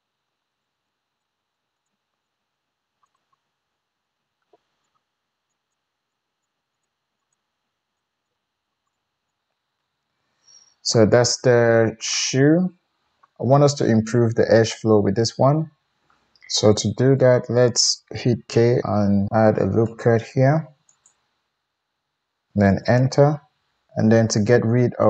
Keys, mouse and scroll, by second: 0.9 r, 1.6 g, 2.6 g, 3.4 g, 3.6-6.8 middle drag, 4.6 g, 5.8-8.0 typing, 6.8 click, 6.8 middle click, 7.3 click, 7.3-9.2 middle drag, 8.6 alt+z, 9.0 alt+z, 9.2 alt+click, 9.4-23.7 middle drag, 16.5 KP_1, 18.5 k, 23.7 right click, 24.0-25.0 drag, 24.5 alt+z.